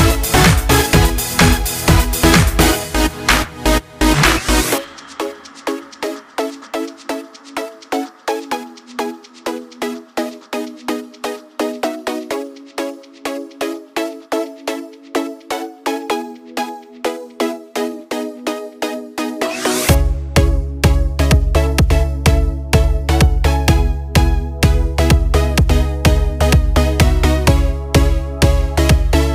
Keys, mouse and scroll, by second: 0.0 click, 7.1-20.1 drag, 22.0 click, 24.3-28.8 drag.